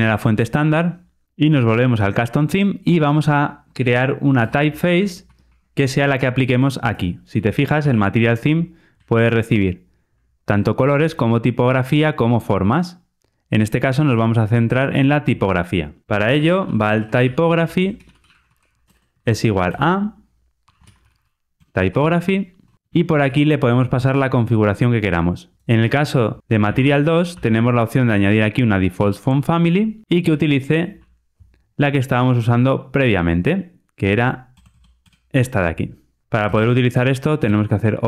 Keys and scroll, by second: 7.7 super+p, 9.4 super+b, 16.0 alt+super+[, 22.7 Return, 23.1 super+p, 28.9 Return, 31.4 super+v, 36.4 alt+Return.